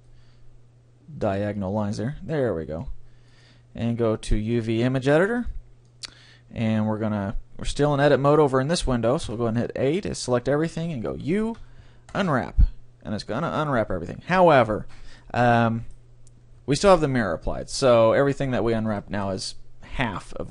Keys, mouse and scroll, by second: 1.6-5.2 drag, 5.6-7.4 drag, 9.3 a, 11.1 u, 15.2-17.0 middle drag, 17.8 click, 18.4-20.5 middle drag.